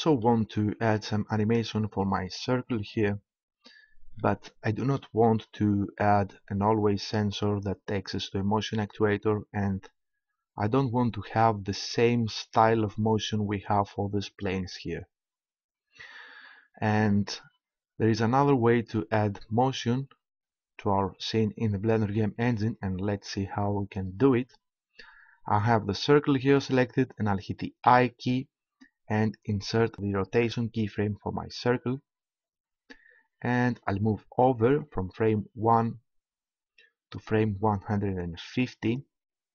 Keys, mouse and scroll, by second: 27.9 i, 34.8-36.4 drag.